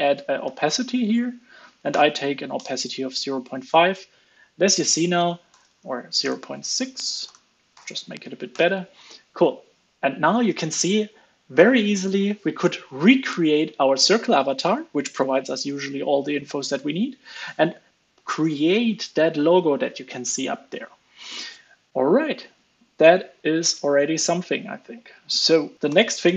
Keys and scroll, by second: 2.8 super+s, 7.8 super+s, 8.5 alt+super+l, 8.7 super+s, 22.6 super+s, 25.7 super+s, 25.7 super+Right.